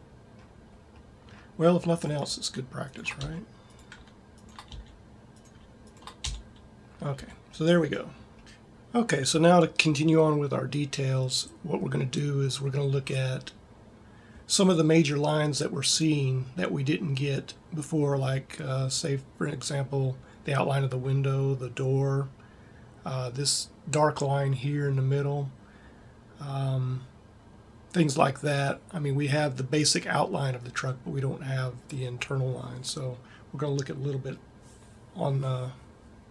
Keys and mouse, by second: 0.9 middle click, 1.8 right click, 3.2 f, 4.7 f, 6.1 f, 6.7 middle click, 7.2 a, 7.8 middle click.